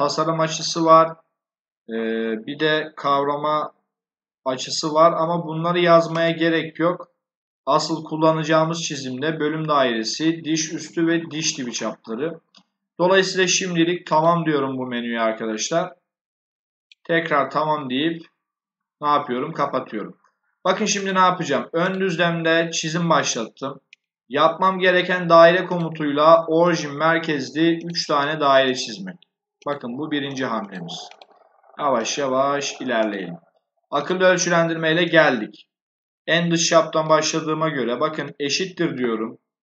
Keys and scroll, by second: 38.1 shift+0.